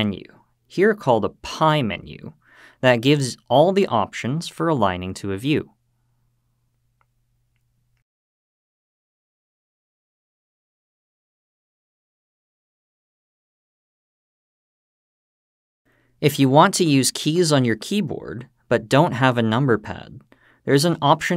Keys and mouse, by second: 4.7 `, 10.4 `, 10.8 `, 12.9-14.1 middle drag.